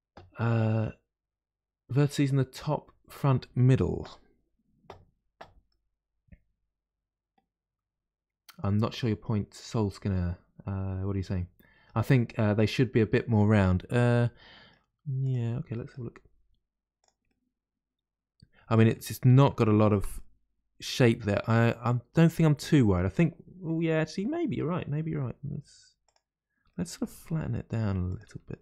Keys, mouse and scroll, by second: 5.7-8.9 middle drag, 13.3-15.2 middle drag, 15.2 click, 15.7 middle click, 16.3 g, 17.3-19.8 middle drag, 19.8 ctrl+z, 20.1-23.1 middle drag, 25.0 g, 26.7-28.0 middle drag, 28.0 click, 28.2 g.